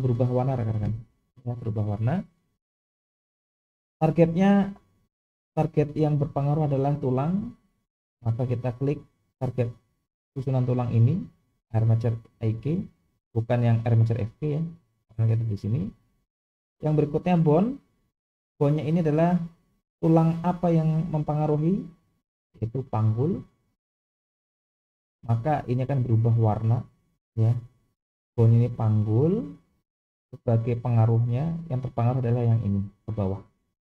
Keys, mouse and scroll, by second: 8.1 click, 21.5-23.8 drag.